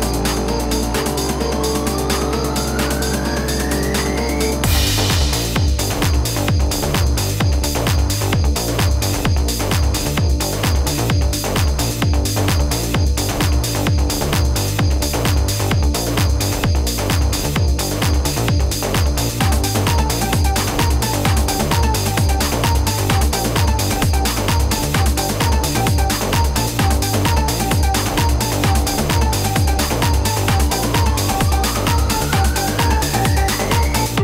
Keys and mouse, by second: 0.6 click, 2.8 click, 4.1 click, 5.8 click, 7.9 click, 9.2 click, 10.5 click, 11.4 click, 12.0 click, 14.0 click, 17.5 right click, 18.8 click, 19.7 click, 21.5 click, 22.5 click, 24.1 click, 25.8 click, 28.7 click, 31.4 -, 32.8 click.